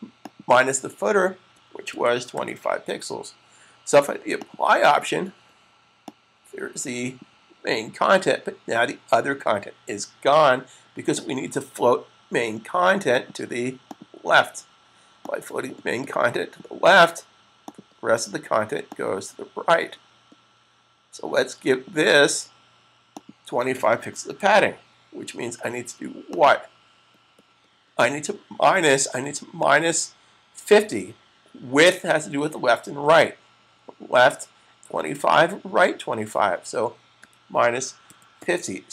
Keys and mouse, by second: 1.3-4.0 typing, 4.5 click, 13.0 click, 17.3 click, 22.9 click, 23.7-24.8 typing, 26.0 click, 29.2 click, 37.1-38.3 typing.